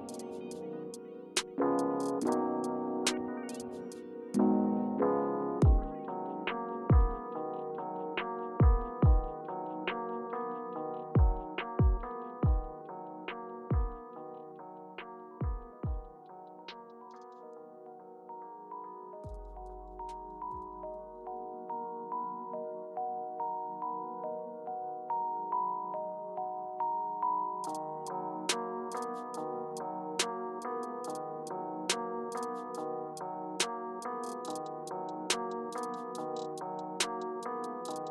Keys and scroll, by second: 1.7 super+y, 3.2 super+z, 6.3 super+e, 7.6 Return, 10.9-11.9 typing, 19.3 Up, 20.0 Return, 20.5 Return, 22.5 space, 26.7 space, 28.1 o, 32.4-34.3 typing, 32.5 Return.